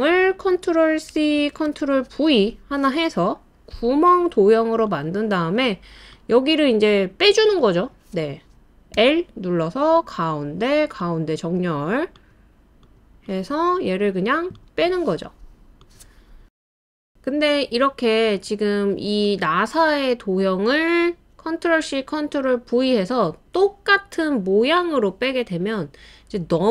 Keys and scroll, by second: 1.4 super+c, 1.7 super+v, 8.9 l, 15.0 typing.